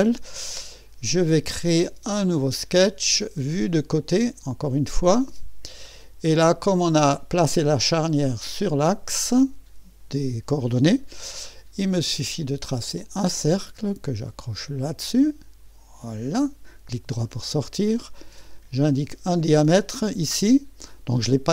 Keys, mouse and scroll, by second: 0.4 middle click, 1.3-2.4 right drag, 2.4 click, 3.9-5.5 drag, 5.3-6.0 typing, 5.9-7.0 scroll up 1, 7.0-8.1 middle drag, 8.4-9.7 scroll up 3, 13.0 click, 13.4 click, 15.0 click, 16.0 click, 16.7 middle click, 18.5 click.